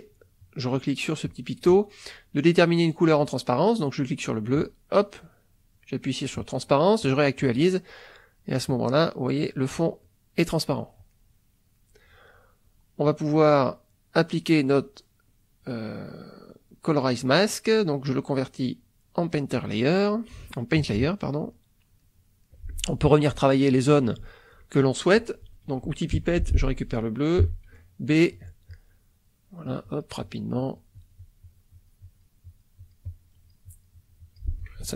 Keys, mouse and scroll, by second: 1.2 click, 3.1 click, 4.5 click, 7.0 click, 8.4 middle click, 10.0 click, 10.5 click, 11.1 middle click, 11.8 middle click, 13.9-19.0 right drag, 20.0 middle click, 20.8 KP_Subtract, 21.5 middle click, 22.5 middle click, 22.5 click, 23.4 ctrl+middle click, 23.4 ctrl+click, 24.3 ctrl+click, 26.2 p, 26.6 click, 27.4 b, 28.7-32.4 drag, 34.8-34.9 ctrl+middle drag.